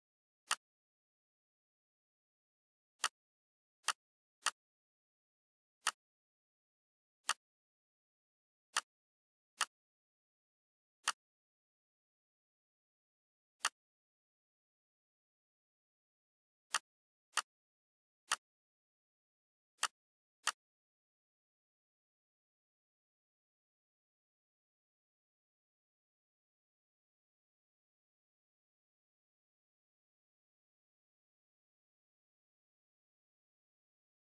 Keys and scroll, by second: 21.4 F4.